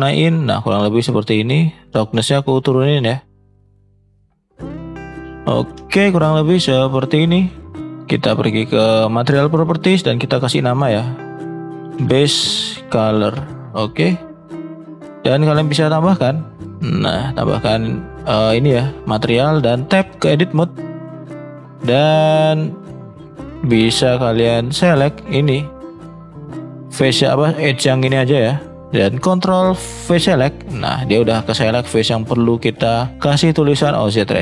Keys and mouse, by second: 7.8-19.2 middle drag.